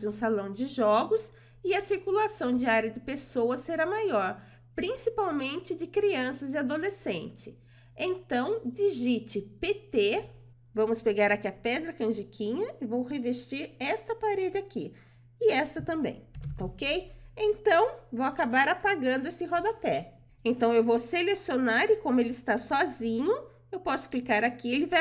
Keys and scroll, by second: 7.8-8.6 typing.